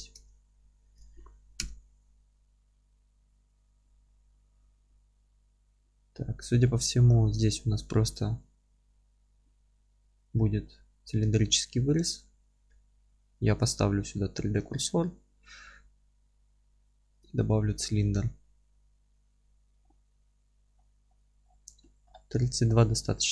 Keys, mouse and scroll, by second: 0.3 alt+z, 1.6 KP_7, 3.6 scroll up 1, 11.3-13.0 scroll up 2, 13.0-17.2 shift+right drag, 17.2 shift+a, 20.6-21.0 scroll down 1, 22.4-22.7 scroll up 1, 22.7 scroll down 1.